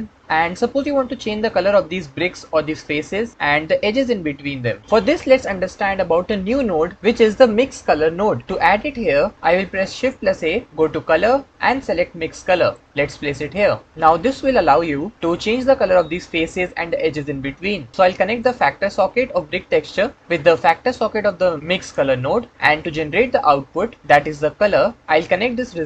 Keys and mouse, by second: 9.9 shift+a, 18.2 click, 18.5-21.8 drag, 25.5 click.